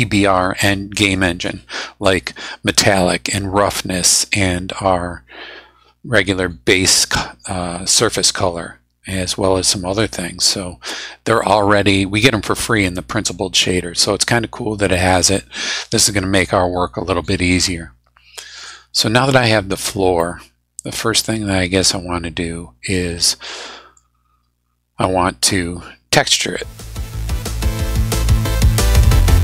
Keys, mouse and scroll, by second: 20.2-21.6 middle drag, 21.6-24.1 drag.